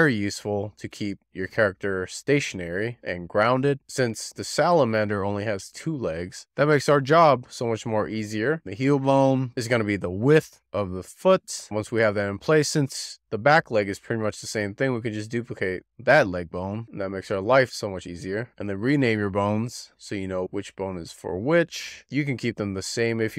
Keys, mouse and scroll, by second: 0.2 shift+middle click, 0.6 click, 0.9 click, 1.1 click, 1.2 scroll down 3, 1.3 click, 1.5 shift+middle click, 1.5 click, 1.8 scroll up 6, 2.0 click, 2.2 click, 3.0 click, 3.1 click, 3.6 click, 4.0 shift+scroll down 1, 4.3 click, 4.5 click, 5.0 click, 5.2-5.7 scroll up 4, 5.4 alt+middle click, 5.7 click, 5.9 click, 6.0 middle click, 6.1-6.5 scroll down 3, 6.2 shift+middle click, 6.6 scroll up 5, 6.8 scroll down 3, 7.1 click, 7.2 shift+click, 7.3 z, 7.5 click, 7.8 scroll up 6, 8.0 scroll down 5, 8.3 middle click, 8.7 click, 8.9 click, 9.0 click, 9.1 middle click, 9.2 scroll down 4, 9.4 middle click, 9.5 click, 9.6 scroll up 4, 9.9 click, 9.9 click, 10.2 middle click, 10.5 scroll up 5, 10.8 scroll down 1, 11.0 scroll up 1, 11.1 scroll down 3, 11.3 middle click, 11.5 scroll up 10, 11.7 click, 12.0 click, 12.2 click, 12.4 click, 12.5 shift+middle click, 13.3 shift+d, 16.8 scroll down 2, 18.3 click, 19.9 BackSpace, 20.1 click, 20.9 n, 21.7 n, 21.9 n, 22.3 F2.